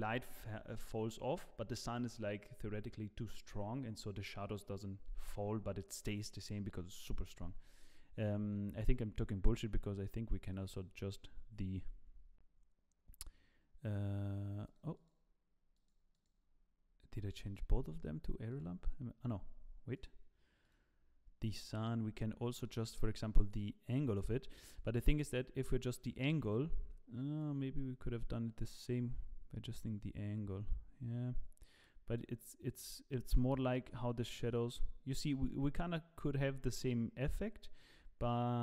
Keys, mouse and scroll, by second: 10.4 click, 10.7 click, 14.7 click, 14.9 click, 16.0 click, 20.0 click, 21.2 click, 23.5 click, 27.4 click.